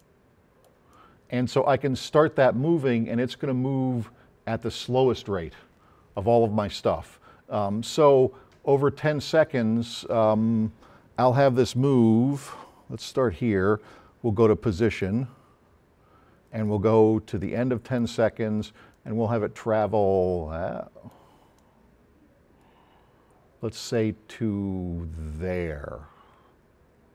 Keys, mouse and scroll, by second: 0.0 click, 0.9-4.7 drag, 8.0-9.9 drag, 11.4 click, 12.4 click, 14.8 click, 16.7-17.7 drag, 21.6 click.